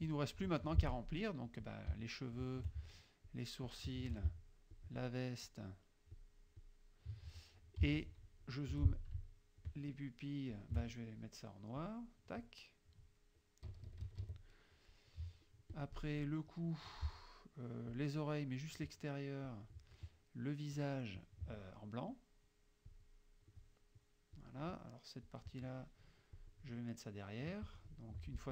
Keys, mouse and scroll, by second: 0.1 ctrl+click, 0.7 ctrl+F2, 0.9 ctrl+click, 1.7 shift+click, 2.4 shift+click, 3.3 shift+click, 3.7 shift+click, 4.8 shift+click, 5.5 shift+click, 6.2 shift+click, 6.7 shift+click, 7.9 z, 8.0 click, 8.7 F2, 9.7 shift+click, 10.6 shift+click, 11.9 click, 13.7 KP_Subtract, 15.2 click, 15.8 click, 16.6 click, 18.0 shift+click, 19.5 shift+click, 20.8 shift+click, 22.9 click, 24.4 click, 25.3 click, 26.4 click, 27.7 click.